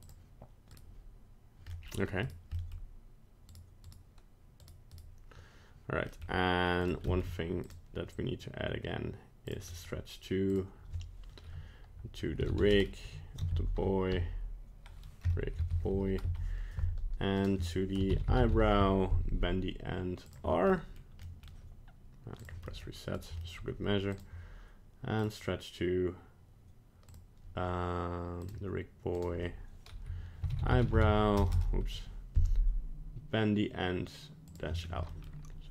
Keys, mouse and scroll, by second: 0.0 click, 0.7 right click, 1.7 middle click, 1.8 middle click, 2.2 right click, 2.5 middle click, 3.5 right click, 3.9 right click, 4.6 right click, 5.0 right click, 6.1 middle click, 6.8 click, 7.1 shift+middle click, 7.6 click, 9.7 middle click, 10.5 click, 17.4 click, 18.2 e, 20.7 middle click, 21.2 middle click, 21.4 middle click, 22.4 click, 22.6 middle click, 23.2 right click, 23.4 middle click, 24.1 click, 27.1 click, 29.1 click, 31.5 BackSpace, 34.7 scroll down 2, 35.1 middle click.